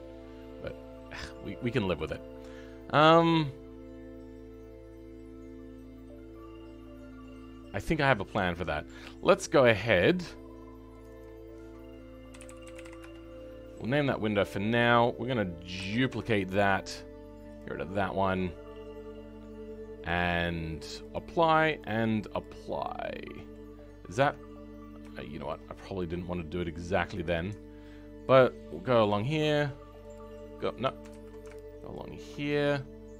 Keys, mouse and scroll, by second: 1.1 middle click, 11.1-15.7 drag, 15.7 shift+d, 17.4-22.8 drag, 22.8 right click, 22.8 middle click, 23.8-24.1 scroll up 2, 24.1 Tab, 25.2-26.3 shift+middle drag, 26.3-28.4 scroll up 2, 28.4 alt+click, 31.0 ctrl+z, 31.9 alt+shift+click, 32.3-32.6 scroll down 5, 32.6-33.1 middle drag.